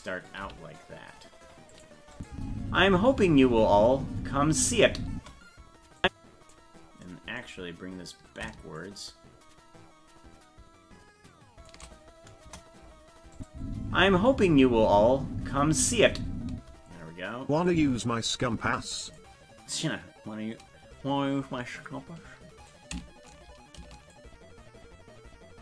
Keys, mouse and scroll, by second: 0.4 g, 2.1 click, 2.3 space, 6.0 click, 8.8-11.7 shift+drag, 12.4 KP_0, 13.4 click, 13.5 space, 17.7-19.2 drag, 22.7 shift+click, 24.1-25.6 shift+drag.